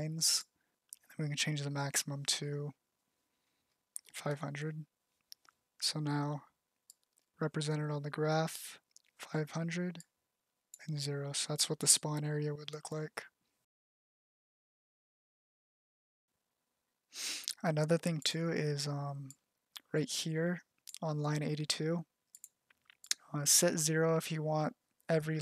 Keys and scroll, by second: 24.5 BackSpace.